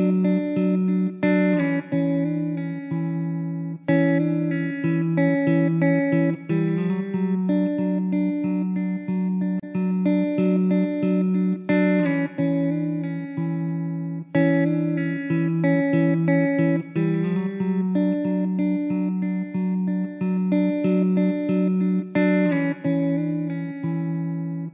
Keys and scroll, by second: 2.0 ctrl+j, 5.8 shift+a, 7.4 s, 10.0 s, 11.9 s, 15.0 s, 18.9 shift+d, 20.1 s, 21.9 s.